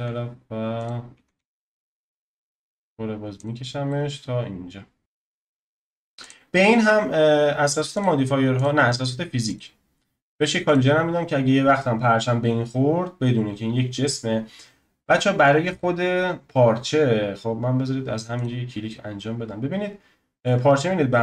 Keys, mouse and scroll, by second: 1.1 s, 3.9-5.0 middle drag, 5.0 scroll down 2, 6.2 click, 7.9 click, 9.5-13.3 drag, 13.3-15.7 scroll up 1, 15.7 click, 18.3-21.2 drag.